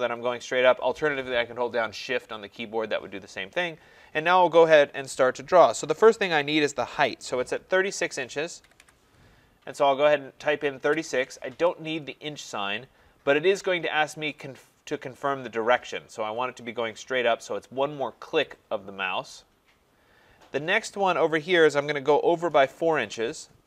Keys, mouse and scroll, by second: 8.7 typing, 10.9 Return, 12.2 scroll, 18.5 click, 23.1 4.